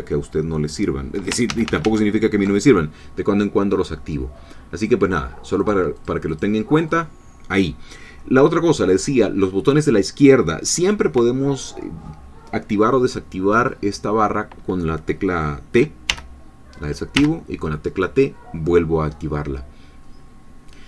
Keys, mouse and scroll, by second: 1.5 ctrl+z, 4.8 click, 5.6 click, 6.0 click, 6.9 click, 16.1 t, 17.2 t.